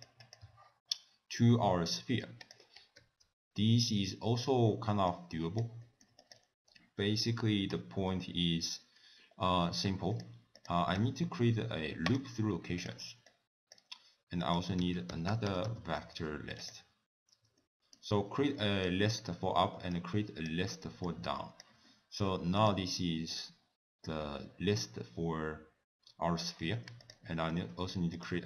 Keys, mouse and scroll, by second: 0.2 click, 0.4 x, 1.9 middle click, 2.4 click, 3.0 ctrl+s, 3.7 middle click, 5.1 click, 5.8 middle click, 6.2 click, 7.0 ctrl+a, 10.6 click, 11.0 w, 13.3 click, 14.4 click, 17.3 scroll up 1, 17.6 middle click, 18.2 scroll down 1, 18.6 middle click, 19.9 click, 21.1 click, 21.9 middle click, 22.6 click, 27.0 click, 27.5 shift+d.